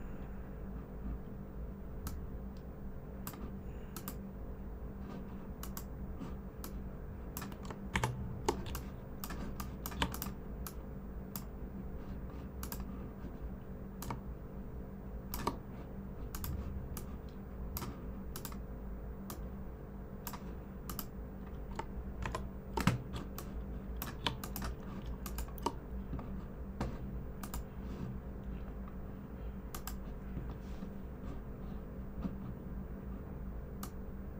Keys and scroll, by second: 7.9 super+-, 8.6-9.2 typing, 22.2 super+=, 23.1-23.7 typing.